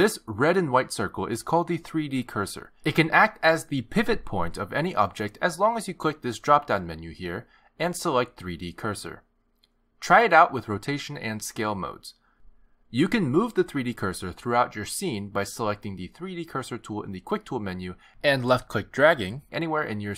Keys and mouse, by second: 7.7 click, 11.7 s, 12.8 r, 17.1 click, 18.2 click.